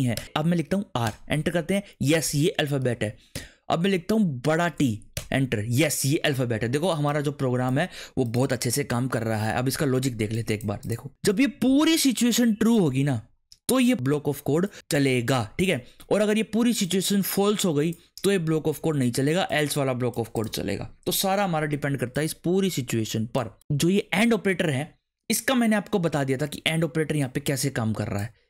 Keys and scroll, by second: 0.1 Return, 0.2 r, 1.0 Return, 2.8 Up, 3.3 Return, 4.6 shift+t, 5.1 Return.